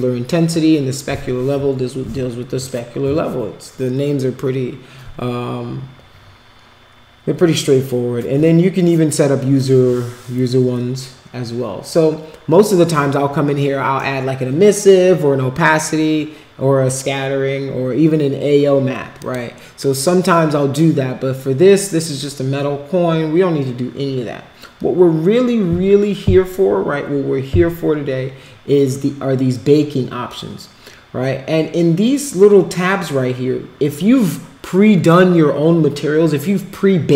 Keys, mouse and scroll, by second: 19.2 click.